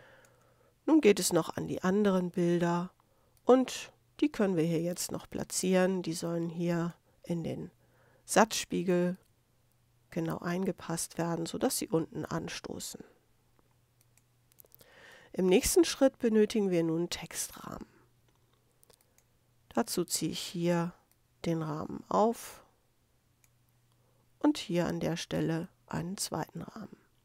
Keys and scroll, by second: 14.6 space.